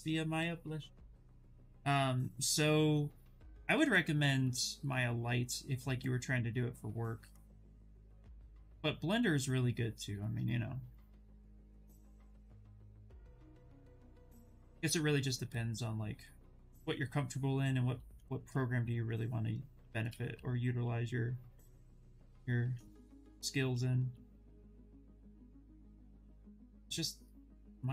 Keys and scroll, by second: 18.0 ctrl+z, 20.0 s, 23.0 ctrl+z, 23.4 s.